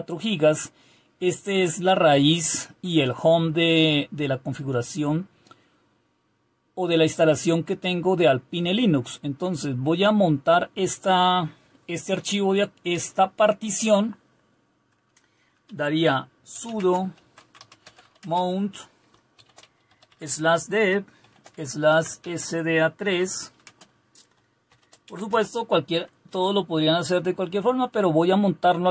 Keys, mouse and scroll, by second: 16.5-18.2 typing, 19.3-23.6 typing, 24.7-26.3 typing.